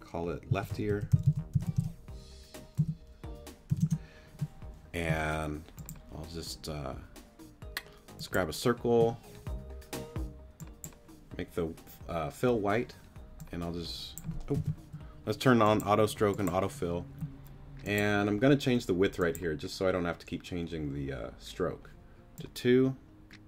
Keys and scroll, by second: 0.5-1.7 typing, 2.8 BackSpace, 3.7 r, 3.8 Return.